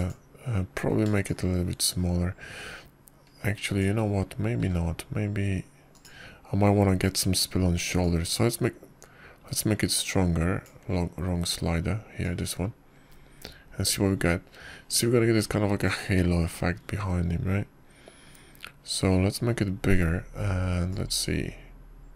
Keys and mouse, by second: 0.5 g, 3.1-5.7 shift+drag, 6.4 g, 9.9-12.5 drag, 14.1-17.8 drag.